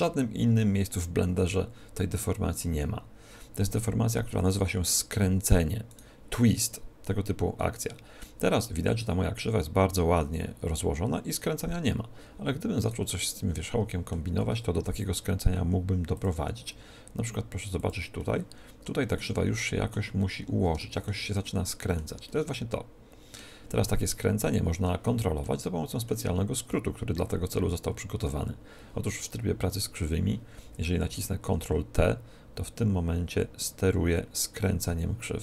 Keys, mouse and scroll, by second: 5.8-7.6 right drag, 6.5-8.3 middle drag, 12.7-14.3 right drag, 13.1-14.9 middle drag, 14.7 g, 16.1-19.6 drag, 16.3 r, 18.1 middle click, 19.5-27.2 middle drag, 30.0-31.8 middle drag, 31.0 ctrl+t.